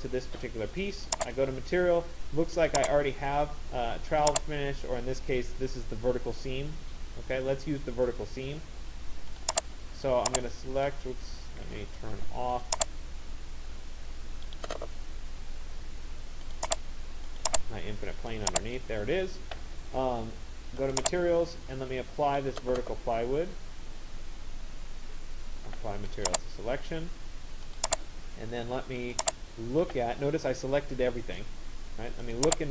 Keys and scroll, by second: 0.0 Escape, 11.3 ctrl+z.